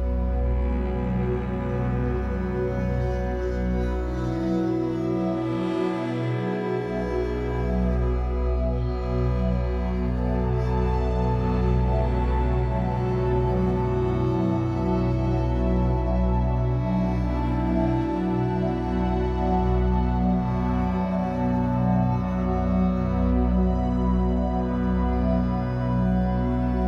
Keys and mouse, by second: 2.5 typing, 4.1-8.9 typing, 7.4 click, 11.3 click, 12.6-17.0 ctrl+alt+drag, 14.6-15.4 typing, 16.9-18.0 typing, 18.1-20.1 drag, 19.1-19.9 typing, 20.9-21.9 shift+drag, 22.2 shift+click, 22.6 shift+click, 23.6 shift+click, 24.1 shift+click, 24.2-24.9 typing, 26.0 typing.